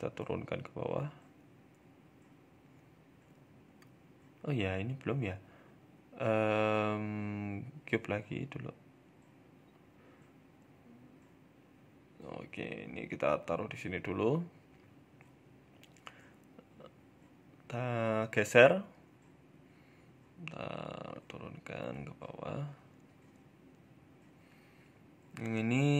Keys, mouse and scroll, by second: 0.0 g, 2.8 middle click, 3.0-3.6 scroll down 2, 3.2 middle click, 3.6 middle click, 4.0 shift+a, 6.6 shift+a, 7.4-8.0 scroll up 2, 8.0-8.6 scroll up 1, 8.0 KP_1, 8.6 s, 9.5 s, 10.8 KP_7, 11.2-12.0 scroll down 2, 11.4 shift+middle click, 12.0 g, 15.4 Tab, 15.6 click, 16.5 g, 18.2 middle click, 18.6 scroll up 3, 18.8 shift+middle click, 19.1 Tab, 19.8 s, 21.4 g, 23.4-23.9 scroll up 1, 23.9 right click, 23.9-24.3 scroll up 4, 24.4 shift+middle click, 24.6 middle click, 25.0 Tab, 25.3 middle click.